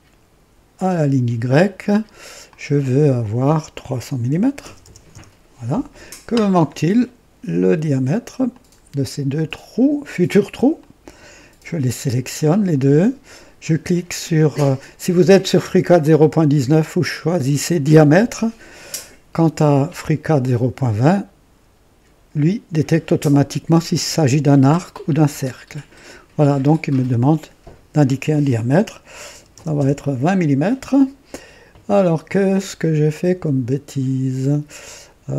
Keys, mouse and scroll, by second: 0.8 click, 2.4 click, 4.2 KP_3, 4.5 KP_0, 4.7 KP_0, 5.0 KP_Enter, 8.4 click, 10.7 click, 15.9 click, 19.3 click, 25.3 click, 29.2 KP_2, 29.3 KP_2, 29.6 KP_0, 29.7 Return, 29.7 KP_Enter.